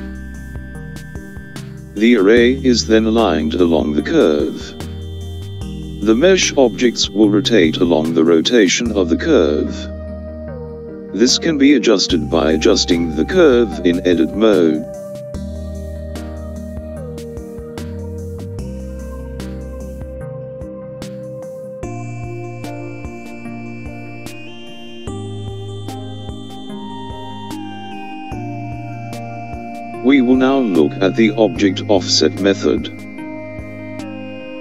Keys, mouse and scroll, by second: 0.4-1.7 scroll down 2, 1.7-3.4 scroll down 1, 4.2-7.2 middle drag, 16.8 click, 19.8 Tab, 23.0 click, 25.2 r.